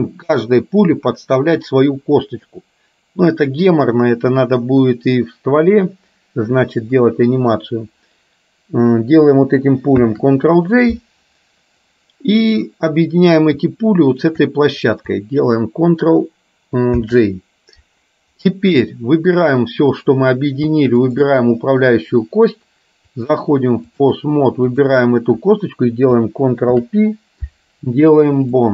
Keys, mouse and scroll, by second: 10.1 ctrl+j, 12.0 middle click, 14.3 shift+click, 17.1 ctrl+j, 18.5 middle click, 21.0 shift+click, 23.3-24.3 drag, 24.8 click, 26.8 ctrl+p.